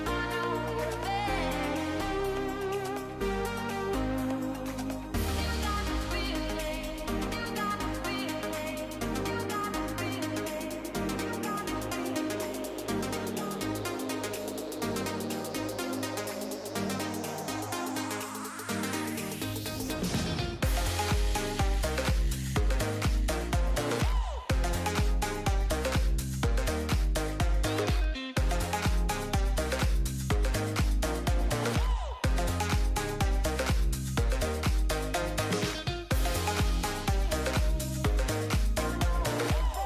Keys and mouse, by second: 6.1 click, 6.4-6.7 drag, 7.1 click, 7.6 middle click, 8.2 click, 10.4 click, 11.5 click, 11.7-12.3 drag, 13.5-13.8 middle drag, 13.9-14.2 middle drag, 15.3-17.3 shift+drag, 18.5 ctrl+shift+click, 18.8 middle drag, 19.5 middle click, 20.7 drag, 22.6 click, 24.8 ctrl+s, 25.2 click, 28.1 middle drag, 28.6 middle click, 29.2 shift+drag, 29.7 click, 33.8 middle click, 34.9 shift+middle click, 35.5 middle click, 36.0 click, 37.1 middle click, 37.5 click.